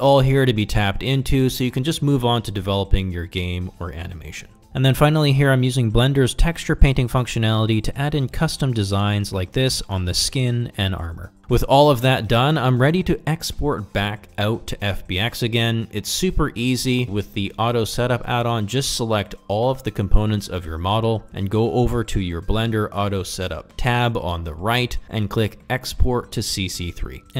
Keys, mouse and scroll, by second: 0.0-3.6 typing, 0.1 click, 0.4 click, 1.1 click, 1.4 click, 1.7 click, 2.0 click, 2.3 click, 2.7 click, 2.8 ctrl+middle click, 3.1 click, 4.3 middle click, 4.5 click, 5.4 click, 6.0 click, 6.6 middle click, 6.7 click, 7.0-11.0 drag, 14.9-16.6 right drag.